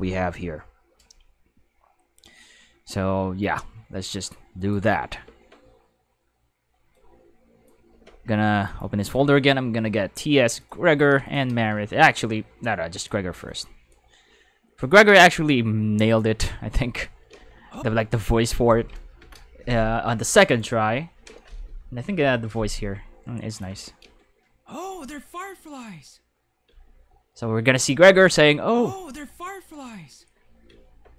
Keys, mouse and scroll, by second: 3.6-4.7 drag, 6.9 click, 8.7 click, 10.6 click, 11.2 shift+click, 12.1 click, 13.0 click, 13.4-13.9 drag, 14.8 click, 16.1 click, 17.3 space, 17.7 space, 20.4 right click, 22.9 g, 23.5 click, 24.0 space, 26.7 space, 27.8 click, 28.1 space, 30.7 space.